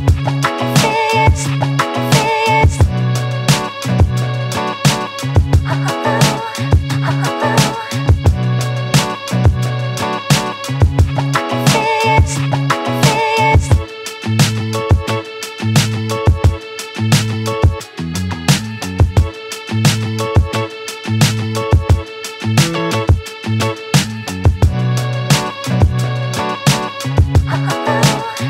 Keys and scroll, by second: 17.3 ctrl+d.